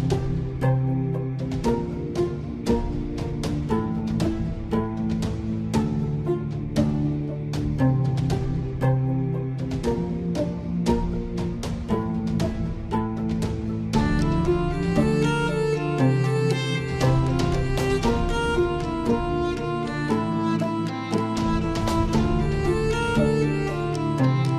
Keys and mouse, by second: 3.8 shift+a, 9.0 s, 11.6 Tab, 12.7 KP_1, 14.8 s.